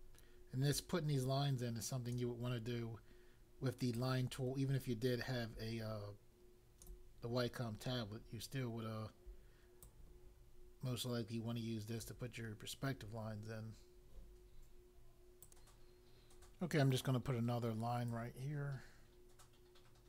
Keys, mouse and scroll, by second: 3.9 click, 9.8 click, 15.4 click, 18.1 click.